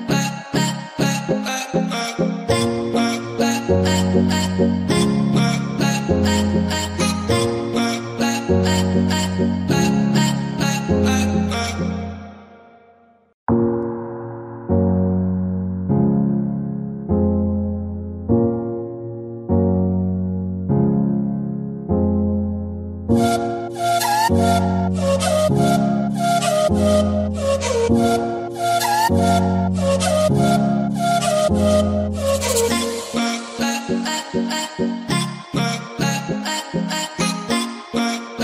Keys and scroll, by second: 2.2-3.1 typing, 6.7-7.6 typing, 16.7 l, 22.4-22.7 typing, 23.2 Return, 26.5-28.1 typing, 30.3-31.5 typing.